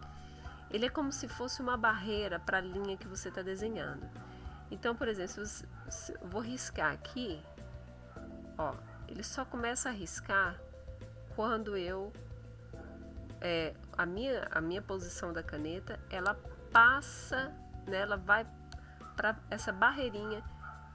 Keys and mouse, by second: 6.2-13.2 drag.